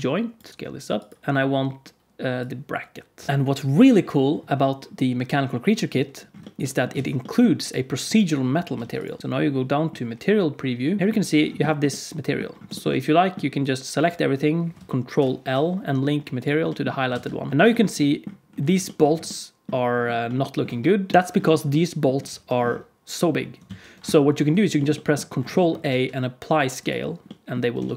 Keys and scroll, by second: 0.5 s, 6.9 alt+a, 8.7 alt+a, 9.2 z, 11.0 KP_Decimal, 15.1 ctrl+l, 17.0 alt+a, 22.2 alt+s, 23.6 ctrl+z, 25.8 ctrl+a.